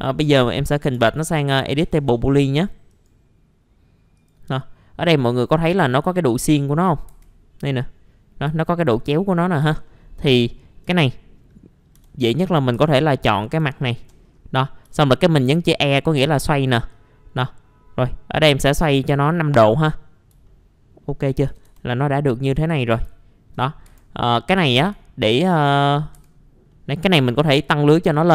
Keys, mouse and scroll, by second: 1.8 ctrl+shift+g, 2.9 right click, 4.1 click, 4.6 middle click, 6.2 scroll up 1, 7.1 F4, 9.1-9.6 scroll down 1, 9.6 F4, 9.8 middle click, 10.2 scroll up 1, 10.9-11.2 scroll up 1, 12.0-12.4 scroll up 1, 12.7 F4, 13.3 click, 13.9 shift+click, 14.2-14.5 scroll down 1, 14.5 middle click, 16.9-20.3 drag, 20.5 alt+middle click, 21.5 alt+1, 21.7 alt+1, 23.1 alt+middle click, 23.8 F4, 25.0 alt+middle click, 25.3-25.7 scroll down 1, 25.7 middle click, 26.1 F4, 26.2 scroll up 1, 26.7 middle click.